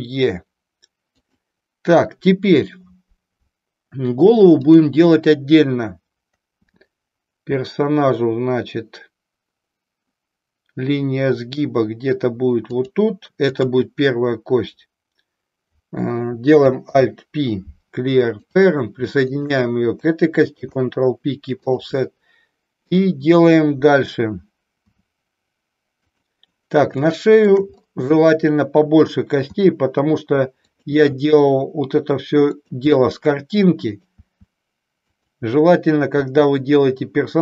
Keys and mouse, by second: 1.3 click, 4.6 click, 12.8 click, 13.5 click, 16.9 alt+p, 19.3 click, 20.6 ctrl+p, 27.1 middle click, 31.0 e, 36.1 e.